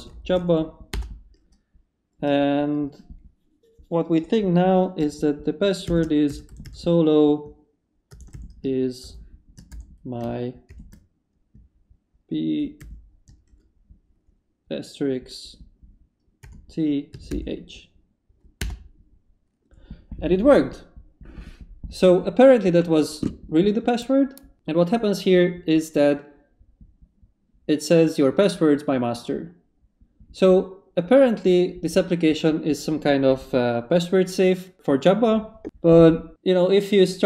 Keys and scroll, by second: 0.0-0.8 typing, 0.9 Return, 5.6-10.7 typing, 12.8 shift+8, 16.4-17.3 typing, 18.6 Return.